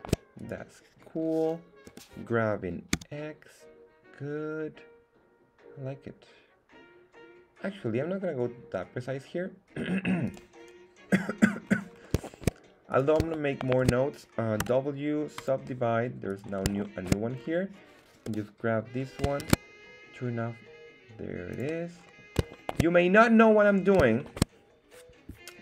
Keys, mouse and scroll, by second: 0.3 right click, 1.8 g, 2.9 x, 10.2 click, 11.6-12.2 scroll down 3, 12.2 shift+middle click, 12.9 right click, 13.6 shift+right click, 14.6 w, 16.3 right click, 16.8 shift+middle click, 17.6 scroll up 1, 18.2 g, 19.4 shift+Tab, 21.5 click, 21.9 scroll up 1, 22.5 shift+middle click, 23.4-24.0 scroll down 4, 24.1 shift+middle click.